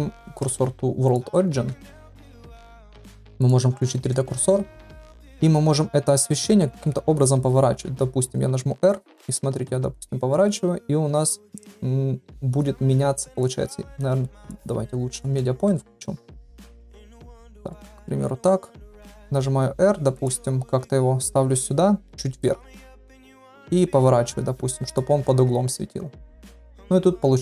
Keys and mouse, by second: 0.1 shift+s, 0.4 shift+s, 1.7 shift+s, 3.4-4.1 right drag, 4.4 shift+middle drag, 8.6 r, 13.9 ctrl+z, 14.5-15.3 drag, 15.6-16.1 middle drag, 16.7 KP_3, 17.7 shift+middle drag, 18.9 r, 20.3 g, 23.2 KP_7, 23.9 r.